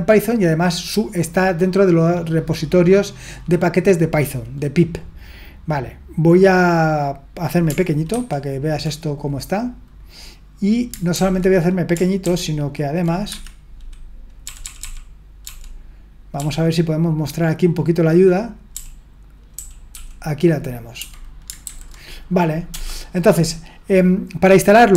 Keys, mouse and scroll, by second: 8.1 ctrl+1, 11.1 super+l, 12.2 ctrl+d, 13.3 Escape, 14.4-15.4 typing, 18.7-19.9 typing, 21.7 super+h, 22.7 BackSpace, 24.6-24.9 typing.